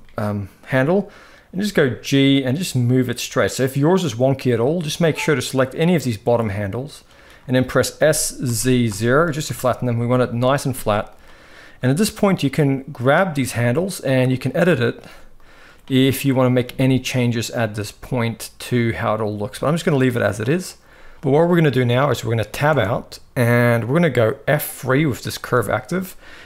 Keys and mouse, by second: 1.2 g, 4.9-6.8 drag, 7.7 s, 10.8 click, 11.8 r, 13.0 g, 14.7 g, 16.0 click, 16.3 g, 17.6 g, 18.8 click, 19.0 g, 22.4 Tab, 25.2 F3.